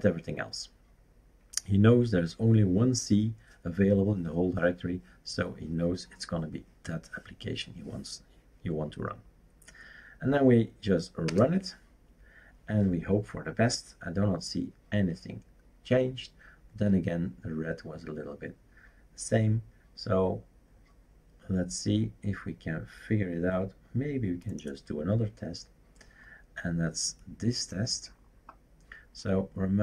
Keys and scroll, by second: 11.3 Return.